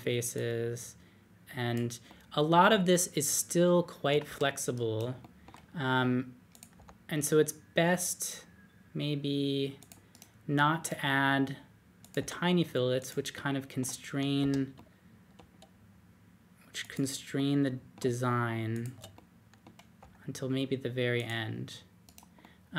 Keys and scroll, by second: 4.2 super+z, 6.7 d, 12.1 d, 14.4 ⟲, 19.9 d.